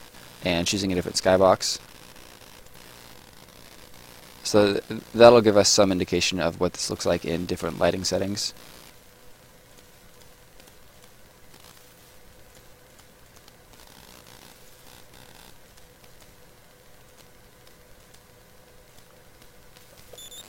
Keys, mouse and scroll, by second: 3.0 right click, 6.8 click, 7.3 right click, 9.6 click, 11.5 right click, 12.4 click, 13.8 right click, 15.6 click, 19.9 space, 20.2 right click.